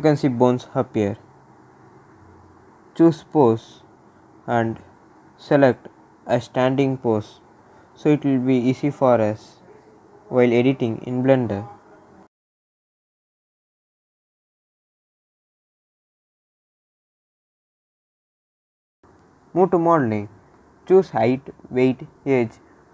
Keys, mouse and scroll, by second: 2.8 click, 4.6-5.3 scroll down 1, 5.4-6.3 scroll down 1, 8.1-11.8 drag, 12.3 click, 17.8 click, 21.4-22.9 drag.